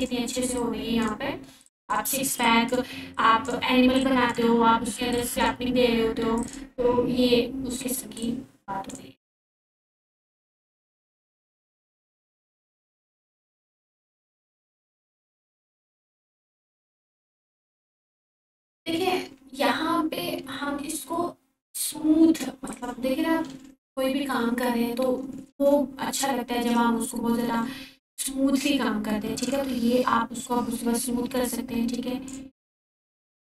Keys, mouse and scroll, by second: 7.1 f, 7.6-10.3 drag, 20.3 ctrl+4, 28.7 ctrl+4, 29.8-30.5 f, 32.6-33.4 drag.